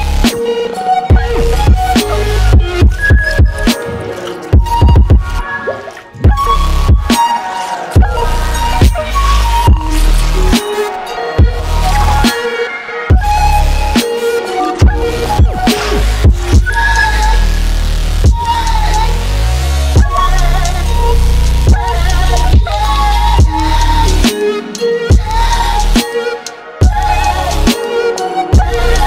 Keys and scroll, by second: 16.5 ctrl+x.